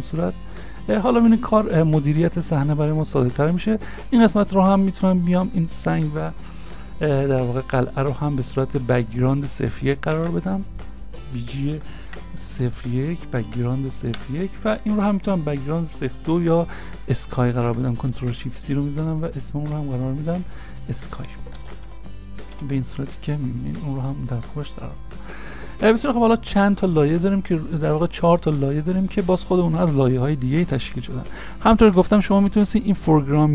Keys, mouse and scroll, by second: 5.6 shift+click, 10.2 ctrl+shift+c, 11.8 shift+b, 12.0 shift+g, 12.8 1, 14.2 Return, 17.7 Return, 18.1 ctrl+shift+c, 21.6 shift+s, 21.9 k, 22.5 s, 22.6 y.